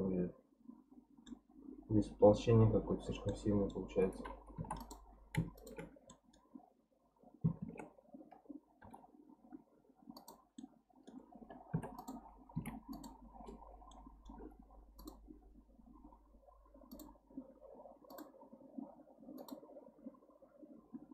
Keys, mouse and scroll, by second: 3.1 scroll down 2, 3.3 middle click, 4.1-4.6 scroll down 1, 4.6 3, 4.8 click, 5.1-5.6 scroll up 2, 5.6 shift+click, 5.9 scroll down 3, 6.1-7.6 middle drag, 7.6 shift+d, 10.6-11.7 middle drag, 11.7 p, 12.5 Tab, 12.9 click, 13.9-15.0 middle drag, 15.0 click, 16.9-21.1 drag.